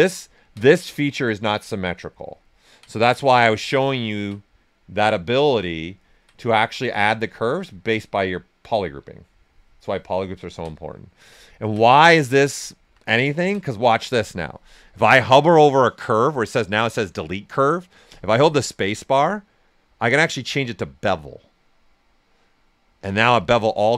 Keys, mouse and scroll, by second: 0.1 ctrl+right click, 1.1 click, 2.4 ctrl+right click, 4.9 click, 5.9 ctrl+right click, 6.5 typing, 7.8 right click, 8.5 click, 9.7 ctrl+right click, 11.1 alt+right click, 11.4 ctrl+right click, 12.6 alt+right click, 13.0-16.8 ctrl+alt+right drag, 18.0 space, 21.1 space.